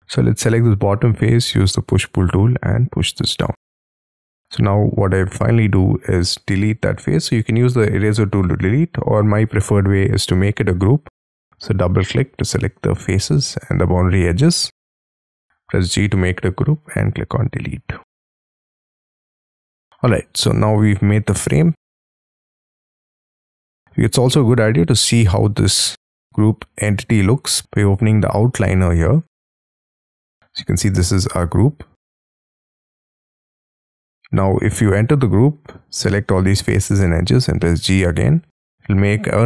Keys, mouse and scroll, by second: 1.1 p, 3.3 space, 4.2 double click, 5.0-5.5 scroll down 7, 5.5 middle click, 9.4-11.2 scroll up 8, 11.2 double click, 11.7 scroll down 2, 11.9 scroll up 1, 12.5 middle click, 15.2 g, 16.7 Delete, 17.8-18.3 scroll down 6, 18.3 middle click, 19.9 middle click, 32.9 double click, 33.2 double click, 35.6 double click, 35.7 double click, 35.9 double click, 37.7 g.